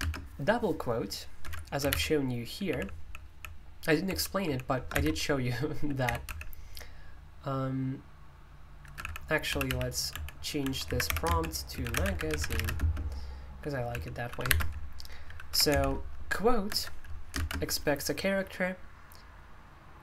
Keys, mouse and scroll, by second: 0.0 typing, 1.4 Escape, 1.8-6.3 typing, 8.9-17.3 typing.